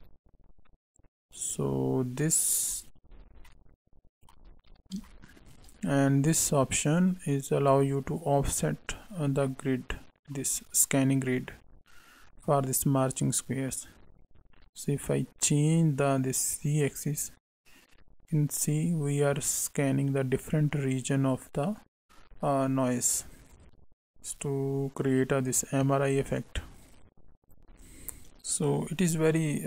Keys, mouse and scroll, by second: 0.9 click, 3.1 scroll down 4, 3.4 middle click, 4.5-5.1 scroll up 1, 5.1 shift+middle click, 7.1 click, 9.5 middle click, 16.6 click, 23.5 click.